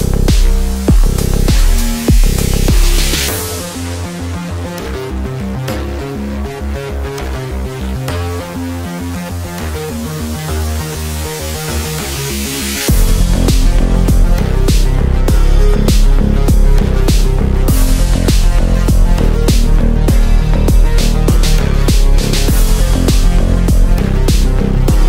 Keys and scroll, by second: 11.3 r, 18.0 ctrl+r, 23.1 e.